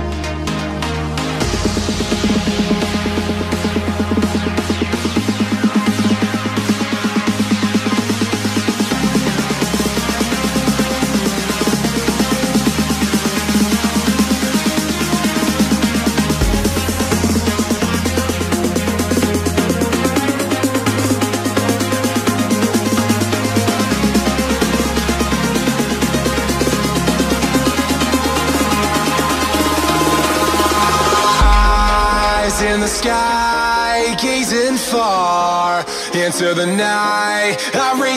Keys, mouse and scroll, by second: 1.6 click, 5.3 click, 10.7 Tab, 11.2 a, 13.0 u, 13.5 Tab, 14.2 click, 15.6 click, 18.2-18.9 scroll down 4.